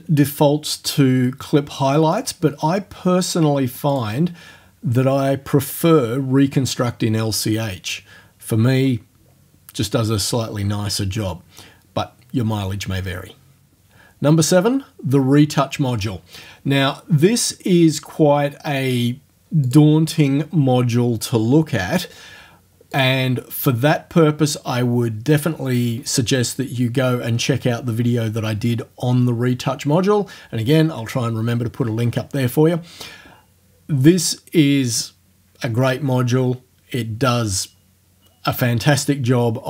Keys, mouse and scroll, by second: 2.2 click, 4.0 click, 16.2 scroll down 1, 17.6-18.5 scroll down 1, 18.8 scroll down 1, 19.7 click, 23.0 click.